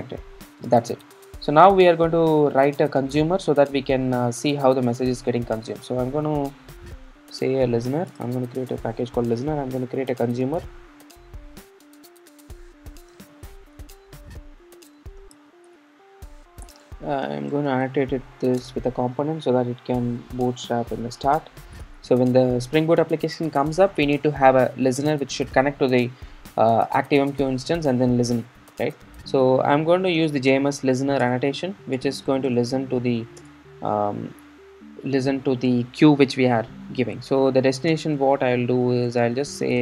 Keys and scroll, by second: 31.2 shift+Return, 33.4 shift+Return, 37.9 Return.